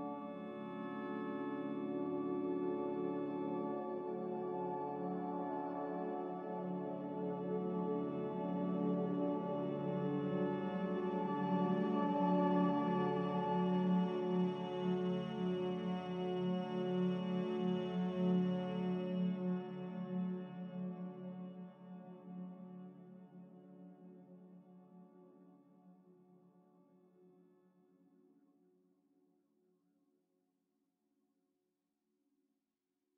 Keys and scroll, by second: 5.9 a, 12.6 z, 13.3 Delete, 32.2 ctrl+z.